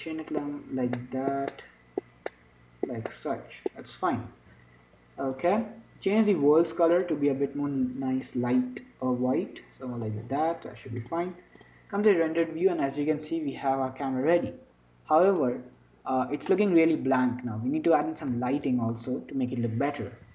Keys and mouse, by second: 4.5 n, 5.6-8.9 drag, 5.8 n, 11.3-13.3 drag, 15.8-17.5 drag.